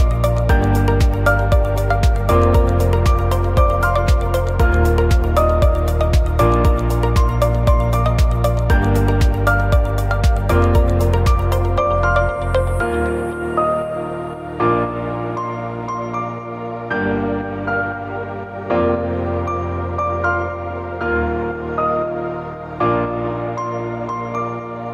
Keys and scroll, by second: 0.7 ctrl+shift+a, 2.7 ctrl+f, 4.3 ctrl+shift+a, 6.9 ctrl+shift+a, 8.7 ctrl+=, 12.2 ctrl+shift+a, 14.0 Left, 14.3 Up, 14.9 shift+Left, 15.2 Down, 15.7 ctrl+shift+a, 16.5 ctrl+c, 16.6 ctrl+f, 19.5 ctrl+shift+a, 21.1 ctrl+z, 23.2 ctrl+shift+a, 23.6 Delete, 24.7 ctrl+=.